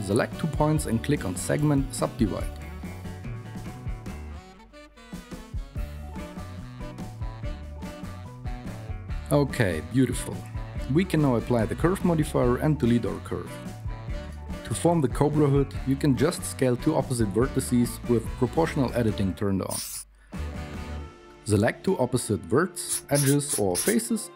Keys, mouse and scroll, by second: 3.5-7.4 typing, 7.6 Tab, 7.9 alt+z, 15.5 x, 17.4 KP_1, 23.2 s.